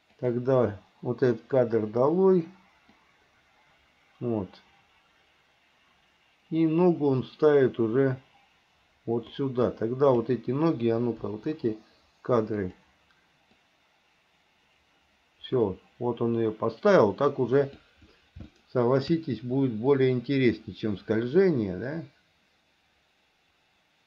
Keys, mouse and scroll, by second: 0.3 click, 2.0 Delete, 3.2-9.6 drag, 10.0 click, 11.5 Delete, 12.8 click, 13.8-18.1 drag, 18.7 shift+middle click, 20.2-24.0 drag.